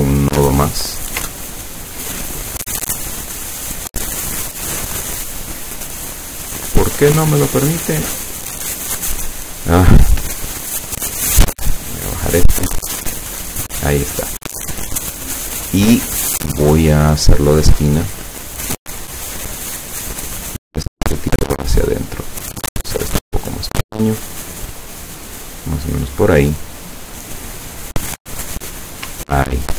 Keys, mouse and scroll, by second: 0.0 click, 0.9 ctrl+click, 1.4-2.0 ctrl+scroll up 1, 2.2 ctrl+click, 2.7 ctrl+click, 3.4 click, 4.7 click, 6.3 click, 11.1-12.5 drag, 13.1 click, 17.2 click, 20.8-22.1 drag, 22.3-27.6 drag, 28.0 click, 29.4-29.7 ctrl+scroll down 2.